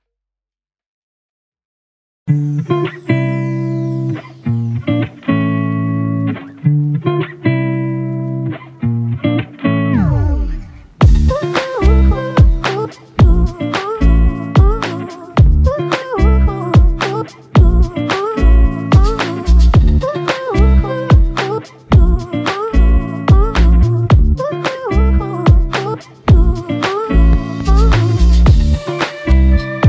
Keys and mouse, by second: 1.9 alt+click, 4.4 ctrl+i, 7.1 alt+click, 9.7 double click, 13.5 alt+click, 14.6-15.0 typing, 16.4 right click, 24.5 typing, 28.1 double click.